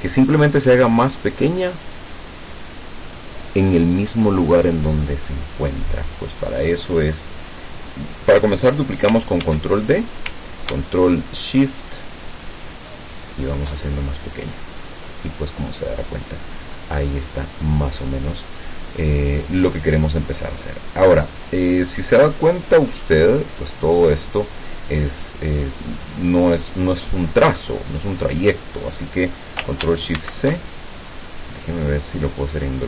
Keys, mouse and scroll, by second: 9.5 ctrl+d, 11.7-13.8 ctrl+shift+drag, 15.0 click, 20.6 click, 22.2 click, 23.3 click, 30.2 ctrl+shift+c, 30.8 ctrl+shift+click, 31.9 click.